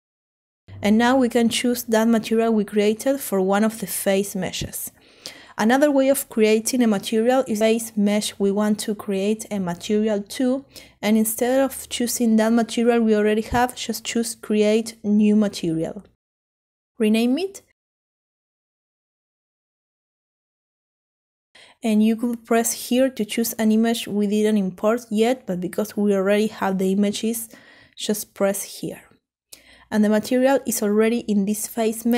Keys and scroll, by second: 15.4-16.3 typing, 18.9 Return.